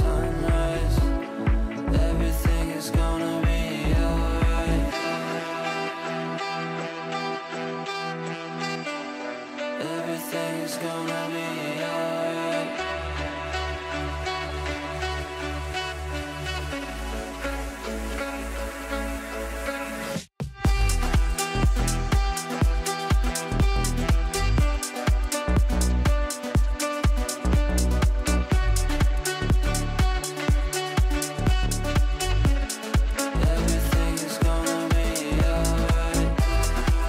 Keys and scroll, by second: 25.1 Delete.